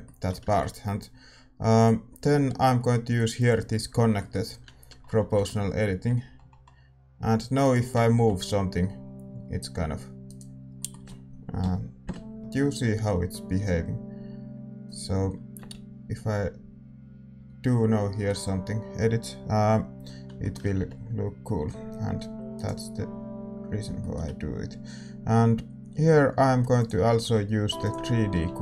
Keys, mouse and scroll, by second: 0.0 middle click, 3.9 scroll down 1, 5.3 g, 7.8-10.2 scroll down 1, 8.1 g, 10.5 scroll down 1, 10.7-14.8 middle drag, 11.6 KP_7, 12.0 KP_5, 12.4-14.8 scroll down 1, 12.4 g, 15.5 r, 20.4-22.2 middle drag, 20.7 g, 23.9-27.8 middle drag, 27.8-28.6 drag, 28.3 r.